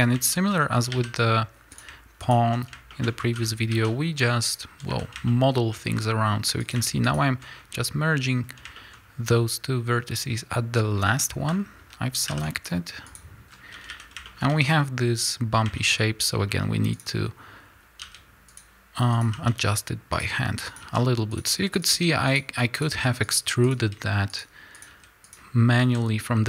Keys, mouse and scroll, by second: 0.2-1.7 shift+middle drag, 0.4 scroll up 1, 0.7 a, 1.1 scroll up 1, 1.7 click, 2.2 shift+click, 2.6 scroll down 1, 2.8-6.6 shift+middle drag, 4.4 alt+m, 4.6 a, 6.9 shift+click, 7.5 scroll up 2, 8.3-8.7 scroll down 1, 8.7-15.9 shift+middle drag, 8.8 scroll up 1, 13.1 alt+m, 13.4 scroll down 1, 13.6 a, 14.4 a, 15.9-16.4 scroll up 1, 16.4 scroll down 1, 16.9 click, 17.9 g, 18.6 click, 19.2 g, 20.2 click, 20.7 g, 21.4 click, 21.8 g, 22.3 click, 22.8 g, 23.2 click, 23.7 g, 24.3 click, 24.8 g, 25.2 click, 25.7 a.